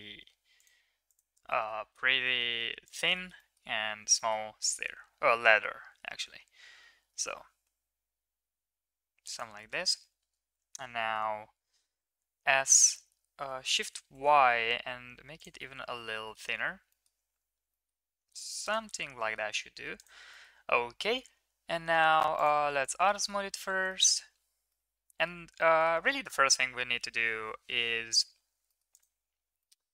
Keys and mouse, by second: 1.1 click, 1.6 s, 3.1 click, 3.1 middle click, 3.1 right click, 3.4 click, 3.4 middle click, 3.4 right click, 4.1 middle click, 4.8 middle click, 5.6 middle click, 7.0 g, 9.5 middle click, 10.8 middle click, 11.9 s, 15.7-16.3 middle drag, 16.8 middle drag, 17.8 middle drag, 19.1 middle click, 19.9 click, 20.3 middle click, 21.0 middle drag, 22.3 right click, 23.1 shift+middle drag, 23.8 middle drag, 24.6-25.2 middle drag, 25.7 shift+middle click, 25.9 middle click, 28.6 middle click, 28.9 click, 29.6-29.9 middle drag.